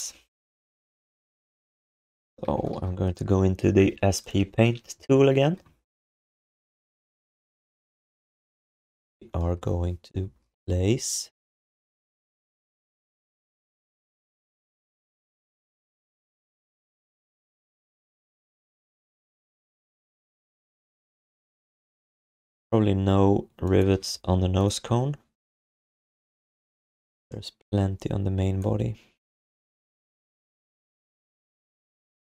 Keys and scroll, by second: 1.7 1, 2.5 alt+shift+d, 2.7 ctrl+s, 6.8 q.